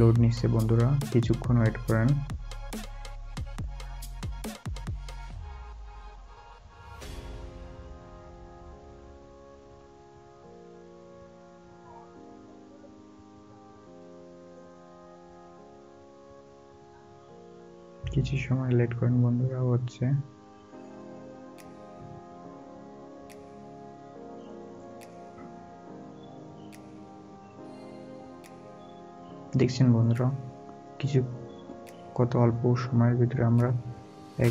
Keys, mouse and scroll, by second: 3.4 scroll down 1, 3.6 scroll up 1, 5.6 scroll down 1, 11.0 scroll up 1, 19.2 scroll down 1, 24.3 scroll down 1, 25.0 scroll up 1, 28.1 scroll down 1, 30.8 scroll down 1, 31.0 scroll up 1, 32.2 scroll down 1.